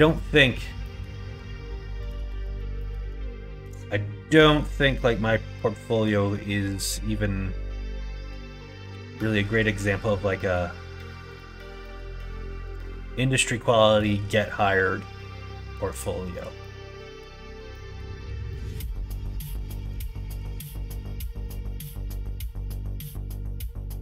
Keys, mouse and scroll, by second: 0.1 middle click, 0.7 middle click, 2.0 click, 2.3 alt+z, 2.7 middle click, 3.5 q, 4.9-6.0 middle drag, 8.8 3, 9.7 middle click, 10.2 middle click, 11.8 middle click, 12.6 g, 16.2 click, 16.5 middle click, 17.6 middle click, 18.4 middle click, 19.6 middle click, 20.1 middle click, 20.5 shift+middle click, 20.9 middle click, 21.3 middle click, 22.4 shift+middle click, 23.1 middle click, 23.6 middle click.